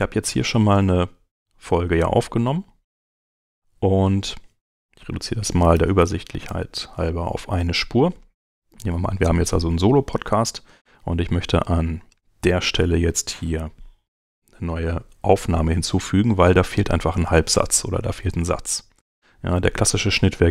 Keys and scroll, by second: 5.7 Delete, 6.5 Return.